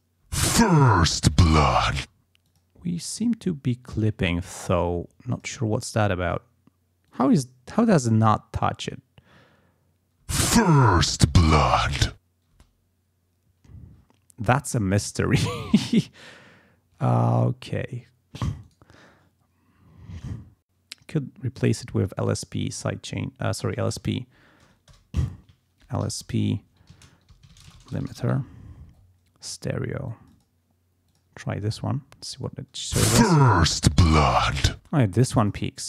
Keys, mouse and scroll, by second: 0.3 space, 2.0 space, 2.5 click, 5.3 click, 5.6-5.9 scroll up 2, 6.3 click, 7.1 click, 10.2 space, 12.6 space, 15.0 click, 15.9 scroll down 2, 17.0 scroll up 2, 18.7 right click, 21.5 click, 22.1 right click, 23.5 click, 24.9 shift+Return, 25.5-26.6 typing, 26.9 ctrl+a, 27.3 ctrl+shift+l, 27.4 ctrl+shift+s, 27.5 ctrl+shift+p, 27.6 ctrl+shift+space, 27.7 ctrl+shift+l, 27.9 ctrl+shift+i, 28.0 ctrl+shift+m, 28.1 ctrl+shift+i, 28.1 ctrl+shift+t, 28.2 ctrl+shift+e, 28.3 ctrl+shift+r, 30.1 click, 31.0 click, 32.8 space, 34.7 space, 35.2 click.